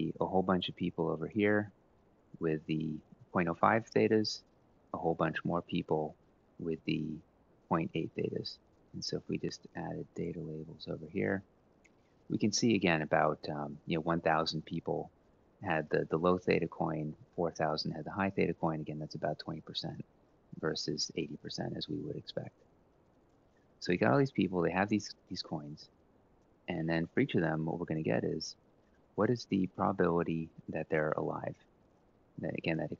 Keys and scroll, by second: 22.5 Delete, 23.6 ctrl+Up, 25.5 Delete, 27.6 Up, 31.3-32.9 typing.